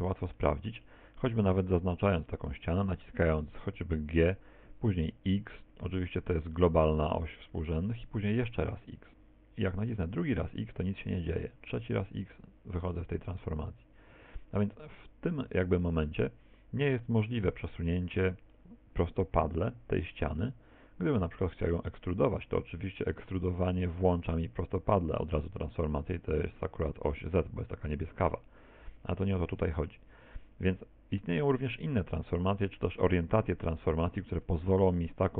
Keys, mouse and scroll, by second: 4.0 g, 15.0 middle click, 20.5 middle click, 23.3 e, 29.5 ctrl+z, 31.2 middle click, 32.8 right click, 33.4 shift+right click, 33.9 shift+right click, 34.7-35.3 scroll up 5.